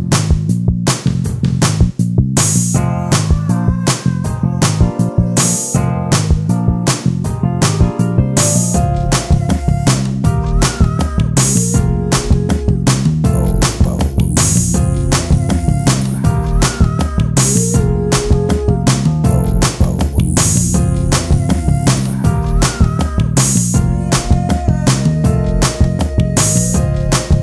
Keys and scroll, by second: 2.3 ctrl+space, 4.4 space, 6.3 j, 6.7 r, 7.2 e, 8.3 ctrl+space, 9.2 x, 10.5 ctrl+space, 13.2 space, 13.9 space, 14.6 space, 15.2 ctrl+space, 16.3 x, 17.0 space, 17.3 ctrl+t, 18.1 space, 19.6 ctrl+space, 22.8 ctrl+space, 23.5 t.